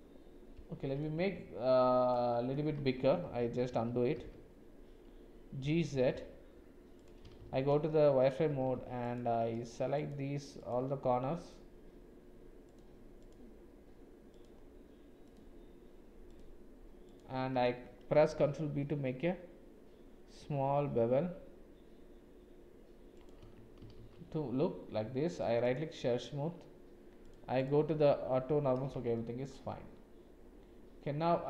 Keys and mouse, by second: 1.2 Tab, 2.0 middle click, 3.0 ctrl+z, 4.2 ctrl+z, 5.8 g, 7.4 shift+z, 8.5 2, 18.3 ctrl+b, 23.4 Tab, 24.0 shift+z, 27.3 click, 27.6 click, 29.1 shift+middle click, 29.7-31.4 middle drag.